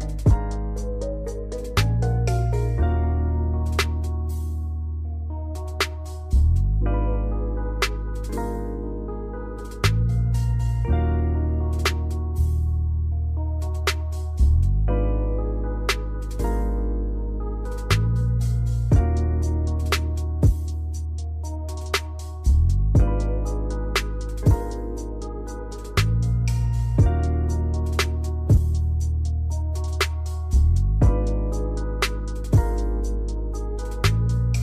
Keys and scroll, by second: 3.8 space, 5.4 space.